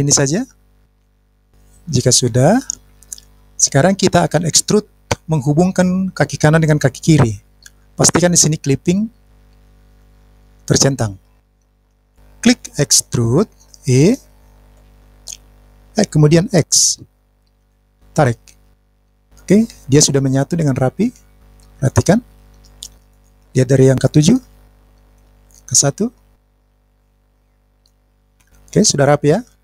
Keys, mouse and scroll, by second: 0.8 middle click, 11.4 click, 14.7 e, 16.8 x, 19.1 click, 20.3-23.2 middle drag, 24.3 KP_7, 25.8 KP_1, 27.8-29.6 middle drag.